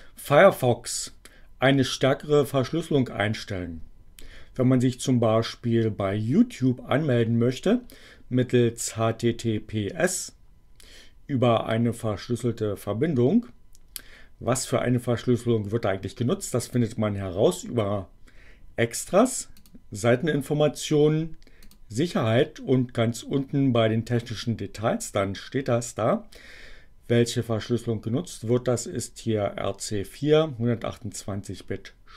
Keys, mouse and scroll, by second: 16.6 click, 19.4 click, 21.6 click.